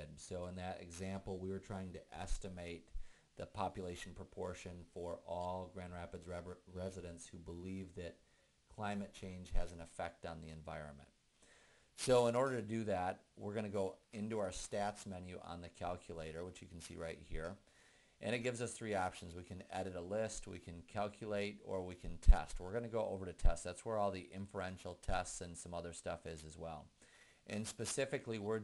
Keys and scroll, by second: 23.6 Right, 24.6 Right.